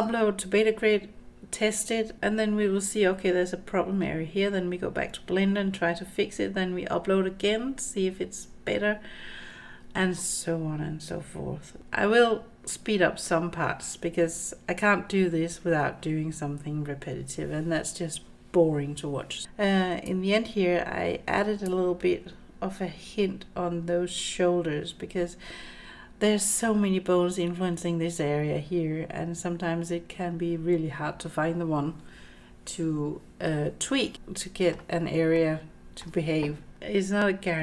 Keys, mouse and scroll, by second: 19.4 middle click, 20.1-21.7 drag, 25.8-26.2 scroll up 3, 26.2 middle click, 34.2-34.7 middle drag, 35.3-36.0 middle drag, 36.8 middle click.